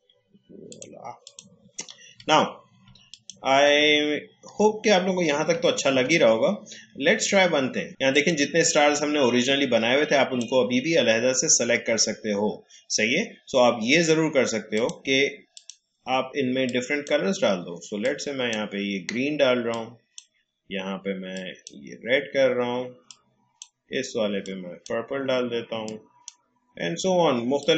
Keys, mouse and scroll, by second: 2.4-2.8 alt+scroll up 1, 3.1 click, 3.8 alt+scroll down 1, 5.9 a, 7.2 click, 8.1-13.0 drag, 14.7-27.7 drag.